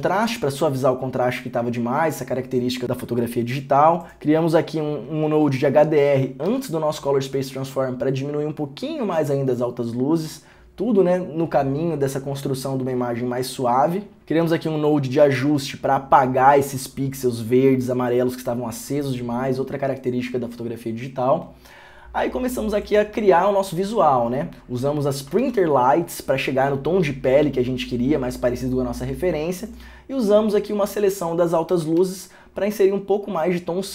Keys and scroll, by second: 0.2 ctrl+d, 15.6 ctrl+d, 25.6 ctrl+d, 32.2 ctrl+d.